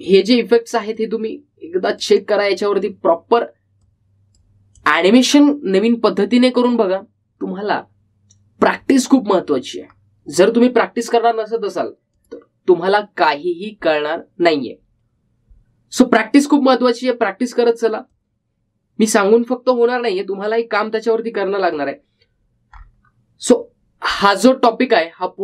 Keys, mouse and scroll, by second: 11.0-12.8 scroll down 1, 13.3 click, 19.3-23.9 drag, 23.9-24.5 scroll down 1.